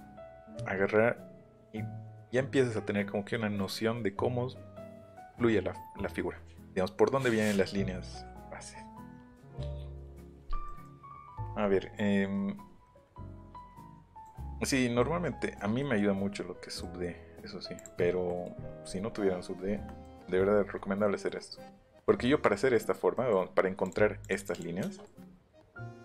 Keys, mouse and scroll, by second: 3.3-4.6 middle drag, 10.7 middle click, 12.8 scroll down 1, 13.2 scroll up 1, 13.6 scroll down 1, 14.2 click, 15.0-16.0 scroll up 2, 16.5-17.0 scroll up 1, 17.7 click, 20.3 middle click, 20.5 middle click, 20.7 middle click, 21.0-21.7 scroll up 2, 22.0 middle click, 23.1 middle click, 23.8 click, 24.2 click.